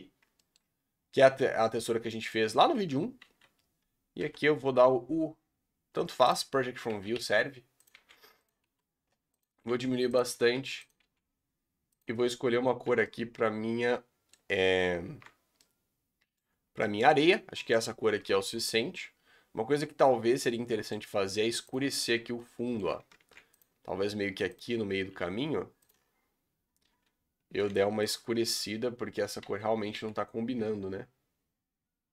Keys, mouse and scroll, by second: 0.0-0.3 scroll down 4, 0.3-1.8 shift+middle drag, 1.8-2.5 scroll down 2, 2.5 middle click, 2.7 Tab, 3.0 scroll down 2, 3.2 a, 6.3-8.6 typing, 9.7 g, 10.3 s, 11.0 g, 12.8 Tab, 13.0-14.5 middle drag, 14.5 scroll up 2, 14.8 z, 15.5-16.4 middle drag, 16.4-16.8 scroll down 6, 16.8-17.8 middle drag, 17.8-18.3 scroll up 3, 18.3 alt+a, 18.4 scroll down 3, 18.6-20.9 middle drag, 20.9-21.7 scroll up 3, 21.7 click, 21.9 Tab, 22.3-23.1 middle drag, 23.1 ctrl+r, 24.9 s, 27.6 3, 28.1 alt+click, 29.4 a, 29.9 g.